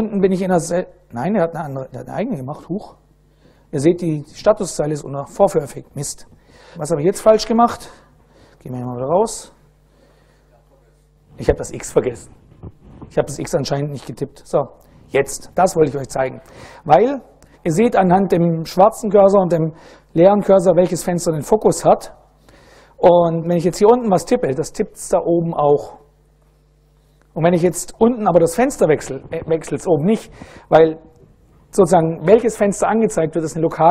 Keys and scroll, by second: 8.3-9.3 typing, 9.8 Return, 11.3 x, 14.1 Return, 23.5-26.0 typing, 27.8 ctrl+a.